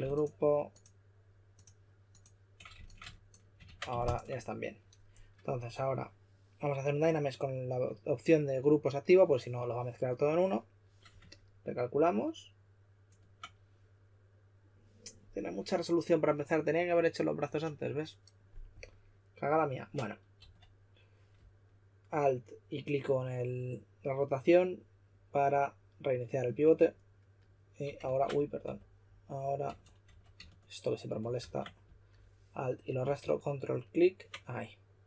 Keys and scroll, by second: 3.6 super+w, 20.3 w, 28.0 super+z, 28.6-30.5 typing, 31.3 super+z.